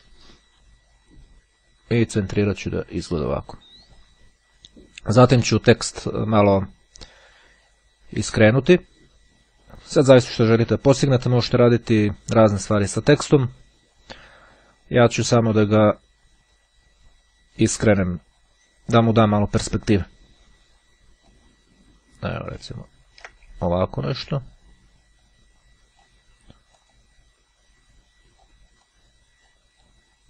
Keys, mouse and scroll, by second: 2.0 click, 3.7 click, 9.6 click, 18.9 click, 21.3-26.7 drag, 27.1-29.1 drag.